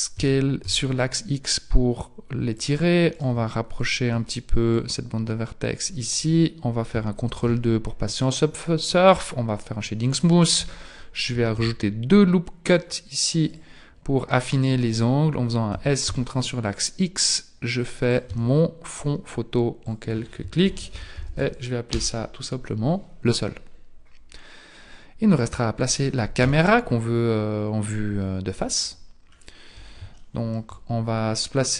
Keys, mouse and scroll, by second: 0.2 s, 3.2 right click, 3.8 shift+right click, 4.8 click, 6.2 Tab, 7.4 ctrl+2, 9.1 click, 10.6 Tab, 11.6 ctrl+r, 15.7 s, 18.3 Tab, 19.8 click, 21.3 o, 26.4 KP_1, 29.3-29.8 scroll up 4, 30.2 shift+middle click, 31.4-31.7 scroll up 1.